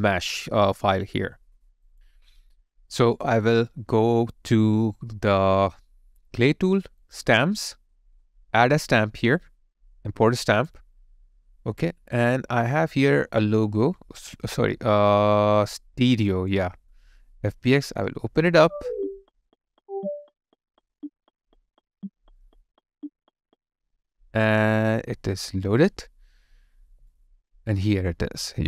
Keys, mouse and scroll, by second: 12.5-13.7 scroll down 1, 27.1 alt+right click.